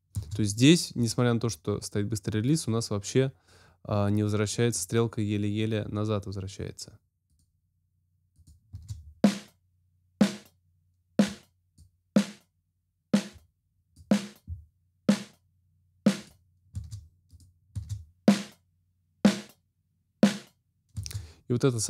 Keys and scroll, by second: 0.1 space, 8.7 space.